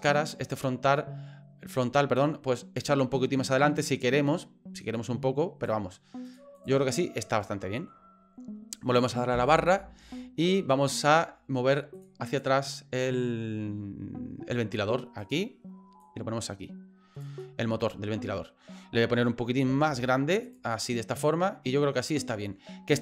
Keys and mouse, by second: 0.2 right click, 0.5 middle click, 2.2-5.7 drag, 6.2 click, 6.9-7.9 middle drag, 9.3 KP_Divide, 11.9 click, 15.2 click, 16.0-17.2 drag, 17.5-19.1 middle drag, 19.7 s, 20.8-22.5 middle drag.